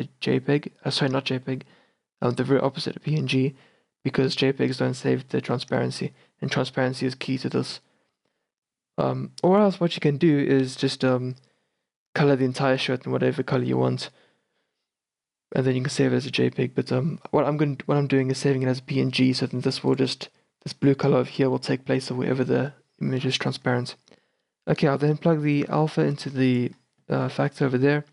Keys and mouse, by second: 15.4 click, 20.0-26.6 drag, 27.6 click.